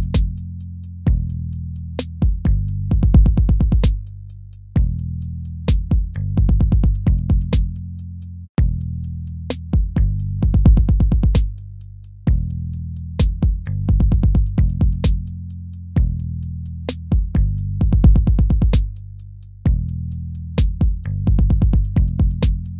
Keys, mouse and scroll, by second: 0.2 ctrl+v, 0.9 ctrl+v, 2.1 ctrl+v, 2.7 ctrl+v, 3.4 ctrl+v, 4.0 ctrl+v, 4.6 ctrl+v, 5.1 ctrl+v, 5.8 ctrl+v, 6.6 ctrl+v, 7.2 ctrl+-, 7.8 ctrl+-, 9.2 ctrl++, 11.5 ctrl++, 12.9 ctrl+-, 13.4 ctrl+-, 13.6 ctrl++, 14.0 ctrl++, 14.6 ctrl+c, 16.2 ctrl+v, 17.2 ctrl+v, 18.1 ctrl+v, 18.9 ctrl+v, 20.2 ctrl+v, 20.9 ctrl+v, 21.9 ctrl+v.